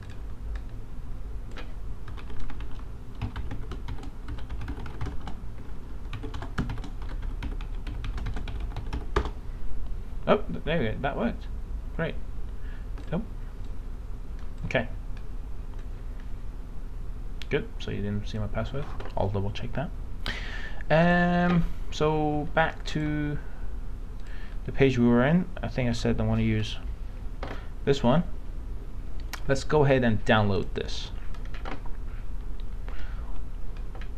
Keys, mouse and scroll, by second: 16.3-18.6 drag.